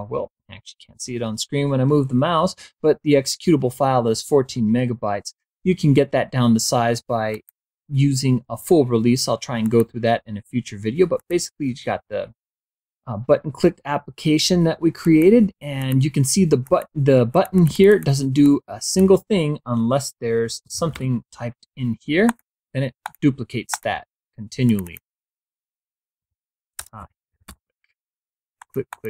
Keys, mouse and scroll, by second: 6.6 click, 8.9 click, 10.4 click, 12.3-14.0 drag, 15.8 click, 16.5 click, 17.2 click, 18.3 click, 20.3-21.3 typing, 22.1 click, 22.9 click, 23.6 click, 24.5 click, 26.1-27.8 typing, 28.4 click.